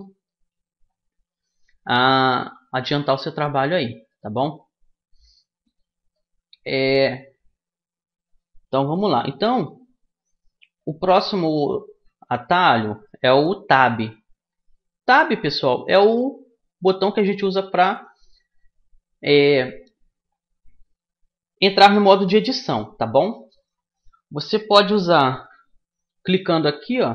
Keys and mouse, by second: 2.0-3.9 drag, 3.9-7.1 middle drag, 9.4-10.4 middle drag, 14.0 Tab, 14.7 Tab, 15.6 Tab, 16.4 Tab, 17.2 Tab, 20.8 Tab, 21.8 Tab, 26.8 middle click.